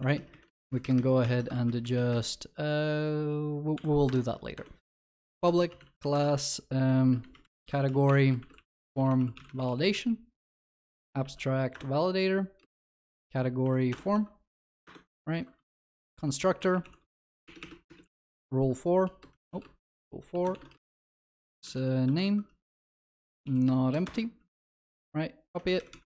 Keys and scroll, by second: 0.0 ctrl+y, 1.5 ctrl+c, 11.8 Return, 16.2 Tab, 18.3 Return, 24.9 ctrl+d.